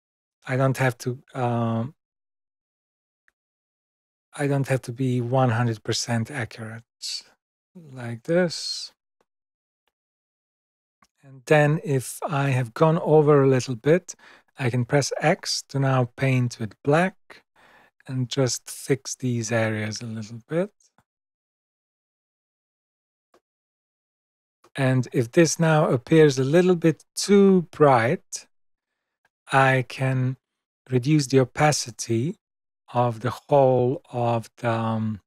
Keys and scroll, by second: 15.2 x.